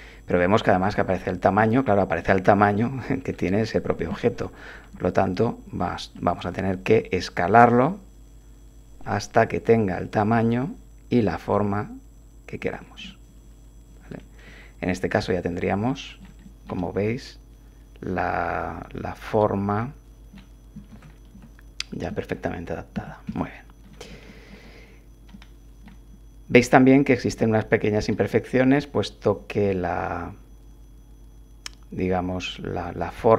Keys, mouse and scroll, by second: 0.7 click, 2.2 click, 2.7 click, 4.1 7, 5.6 s, 12.6 click, 13.0-20.5 drag, 20.9 1, 21.3 3, 22.9 3, 23.3 1, 24.3 shift+middle click, 24.6 shift+click, 25.1-26.0 drag, 28.1-29.8 drag.